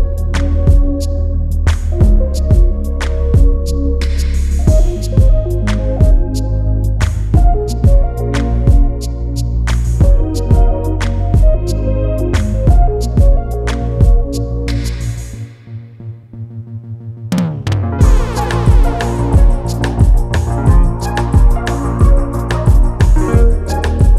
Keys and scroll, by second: 14.2 Delete, 21.6 ], 21.7 Delete.